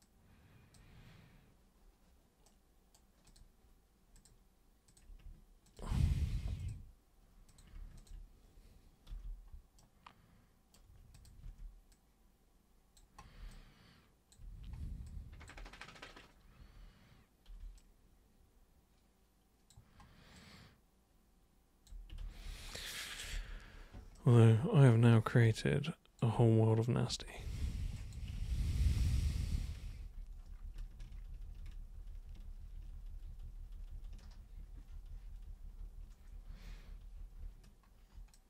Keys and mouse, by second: 0.0 super+click, 2.5 super+right click, 3.3 super+click, 4.2 super+click, 4.9 super+click, 5.6 ctrl+shift+super+click, 6.6 super+click, 7.5 super+click, 8.0 ctrl+shift+super+click, 9.1 super+g, 9.8-10.8 super+right drag, 11.1 super+click, 11.4 super+w, 11.9-12.9 super+drag, 13.5-14.3 alt+super+drag, 15.1 alt+super+click, 16.6 super+3, 17.8-19.7 alt+super+drag, 20.3-21.9 alt+super+drag, 22.2 ctrl+super+z, 22.4 ctrl+super+z, 23.3 ctrl+super+z, 24.1 super+right click, 25.6-26.2 alt+super+drag, 27.1 super+1, 28.0 alt+super+click, 28.5 ctrl+super+z, 28.7 ctrl+super+z, 29.0 ctrl+super+z, 29.2 ctrl+super+z, 29.4 ctrl+super+z, 29.5 ctrl+super+z, 30.0 ctrl+super+z, 30.2 ctrl+super+z, 30.7 ctrl+super+z, 31.3 ctrl+super+z, 31.5 ctrl+super+z, 31.8 ctrl+super+z, 31.9 ctrl+super+z, 32.3 ctrl+super+z, 33.6 ctrl+super+z, 33.9 ctrl+super+z, 34.3 ctrl+super+z, 34.7 ctrl+super+z, 34.9 ctrl+super+z, 35.1 ctrl+super+z, 35.4 ctrl+super+z, 35.6 ctrl+super+z, 35.8 ctrl+super+z, 36.3 ctrl+super+z, 36.5 ctrl+super+z, 36.8 ctrl+super+z, 37.4 ctrl+super+z, 38.3-38.4 alt+super+drag.